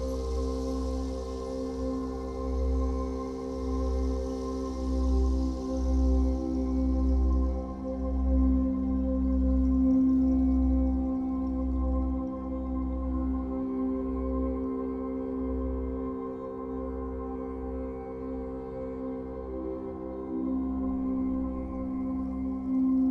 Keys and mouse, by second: 3.6-4.8 typing, 5.0 click, 7.9 click, 10.1 click, 11.3 ctrl+z, 13.0 click, 14.1 z, 15.6-16.8 typing, 17.2 ctrl+z, 18.7 click, 19.2 ctrl+z, 20.1 space, 20.4 t, 21.1 click, 21.6 click, 22.5 shift+click.